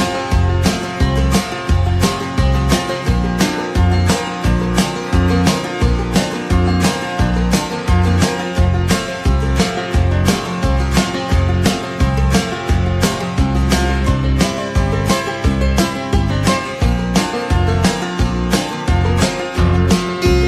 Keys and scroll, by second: 15.7 ctrl+c, 15.8 ctrl+v.